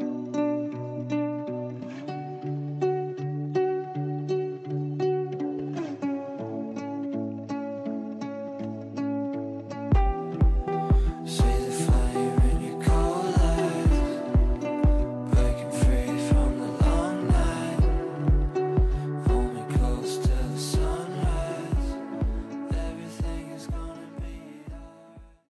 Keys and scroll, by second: 2.9 g, 7.5 g.